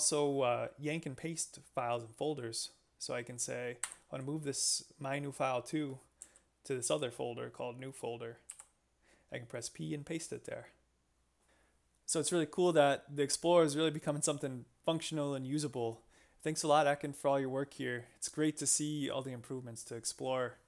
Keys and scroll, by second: 3.9 y, 6.2 j, 8.5 p.